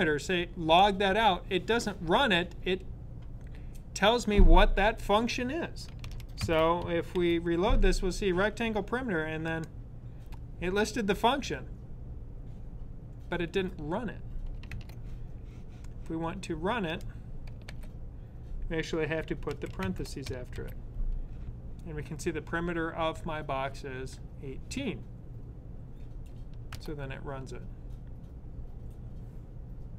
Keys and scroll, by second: 5.9 super+s, 7.0 super+r, 17.4 super+/, 19.2 super+s, 20.3 super+r.